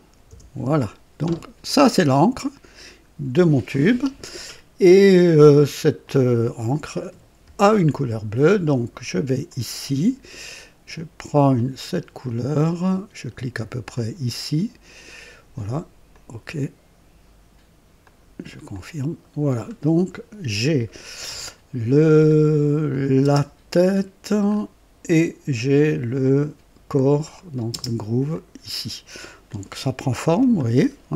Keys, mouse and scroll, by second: 0.2 KP_Enter, 1.6-3.0 drag, 6.0 click, 7.4 ctrl+d, 9.4 click, 11.5 click, 13.9 click, 16.1 click, 18.0 click, 18.7 click, 19.4-19.7 scroll down 1, 21.9-22.2 scroll up 1, 22.9 click, 23.2 space, 23.2 space, 24.4 scroll up 1, 27.2 click, 27.7 space, 28.3 click, 29.4-30.1 drag, 30.2 KP_2, 30.8 scroll up 1.